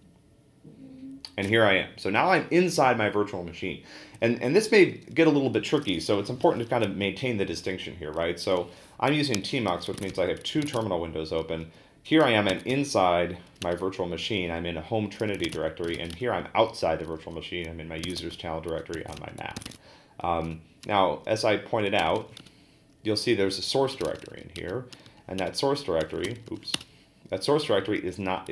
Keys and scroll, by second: 9.8-13.2 typing, 13.6 Return, 15.2-16.4 typing, 17.8-27.0 typing, 25.4 Return.